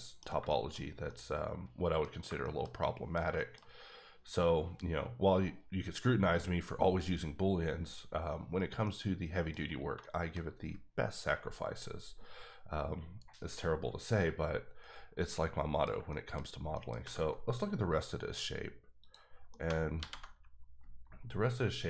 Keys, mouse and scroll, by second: 0.7-1.0 shift+scroll down 2, 1.0 middle click, 1.2 middle click, 2.4 shift+middle click, 3.8-4.9 scroll up 1, 4.9-6.5 scroll up 1, 8.8 middle click, 9.5 scroll down 1, 10.0 shift+middle click, 15.4 middle click, 16.4 scroll down 1, 16.7 middle click, 17.0 Tab, 19.0 click, 19.5 middle click, 20.0 alt+h, 20.5-21.2 scroll down 1.